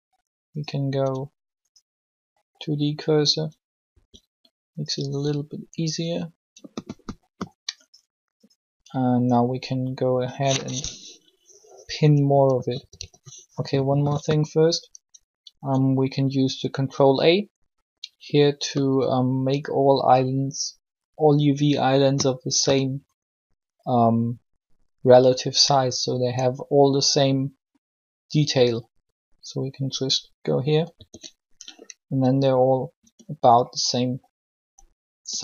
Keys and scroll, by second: 3.8 s, 12.7 typing, 30.7 ctrl+a, 33.0 s, 35.2 s.